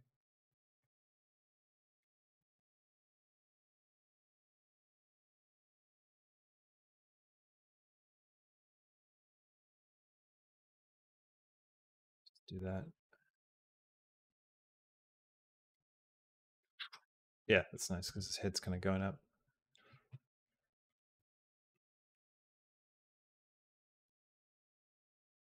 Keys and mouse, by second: 0.6-1.8 drag, 2.1 g, 4.5-5.8 drag, 6.0 space, 6.7 space, 6.9-9.5 drag, 10.2 g, 12.2 click, 13.0 space, 14.1 space, 14.5-15.5 drag, 15.7 space, 17.3 space, 17.5 click, 17.8 space, 20.7 click, 23.6 click, 23.9 space, 24.2 space.